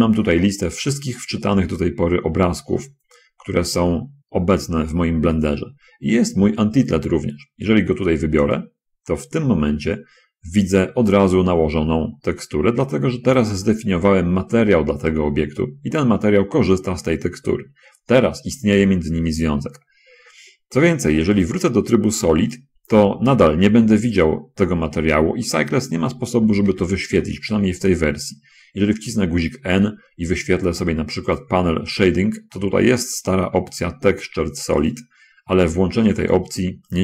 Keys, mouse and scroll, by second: 8.9 click, 11.2-11.9 scroll up 1, 12.2-13.4 middle drag, 14.0 shift+middle click, 22.9 click, 24.6 middle click, 27.1 n, 31.7 click, 36.6 click.